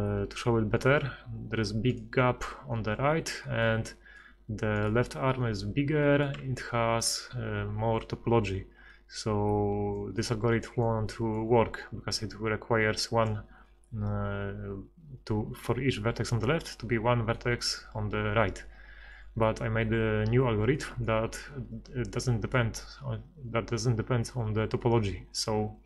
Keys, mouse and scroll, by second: 4.0 middle click, 4.8-6.0 middle drag, 6.2 middle click, 6.4 z, 6.9 middle click, 12.1-14.1 d, 19.7 z.